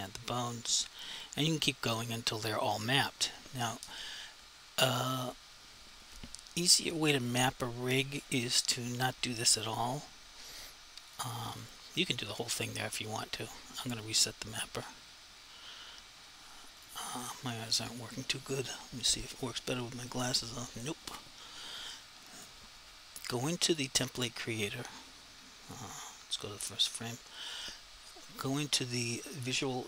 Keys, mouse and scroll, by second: 1.3 click, 11.1 click, 16.8 click, 22.4 click, 26.9 click.